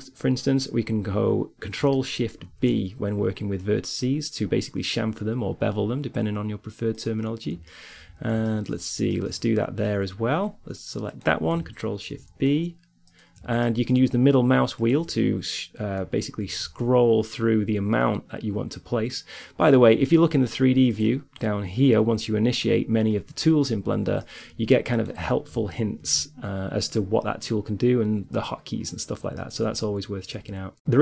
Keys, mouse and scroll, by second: 2.5 ctrl+shift+b, 7.1 middle click, 8.0 click, 8.5 middle click, 10.7-13.0 right drag, 11.9 ctrl+shift+b, 13.7-15.0 middle drag, 15.0 right click, 16.7 ctrl+shift+b, 24.5 middle click, 25.2 click, 25.3 ctrl+shift+b, 25.3 right click, 26.3 scroll up 1, 28.7 middle click, 29.3-30.9 middle drag.